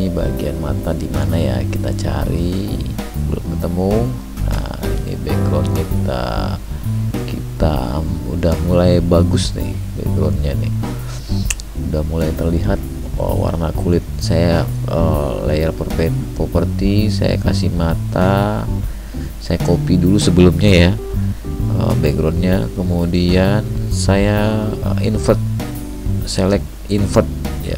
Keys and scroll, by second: 11.9 ctrl+j.